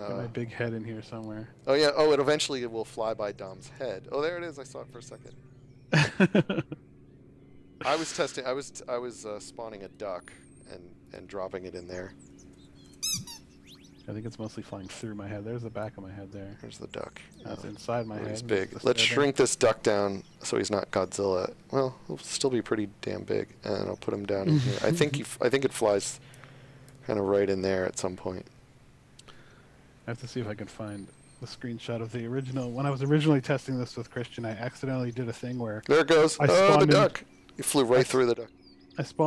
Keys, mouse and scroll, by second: 6.6 s, 8.3 w, 8.9 s, 9.8 click, 12.0-13.1 typing, 15.8 click, 18.7-19.5 shift+scroll, 20.4 shift+a, 21.2 d, 22.5-23.0 scroll down 2, 23.9-24.4 scroll down 1, 25.0 scroll up 1, 39.1 w.